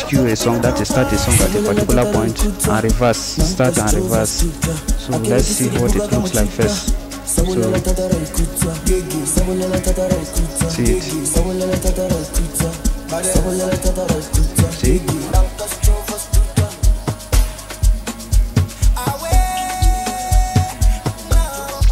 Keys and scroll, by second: 6.3 Tab, 6.8 Tab, 11.1-14.0 typing, 14.8 Tab, 15.3 \, 17.2 u, 20.3-21.9 typing.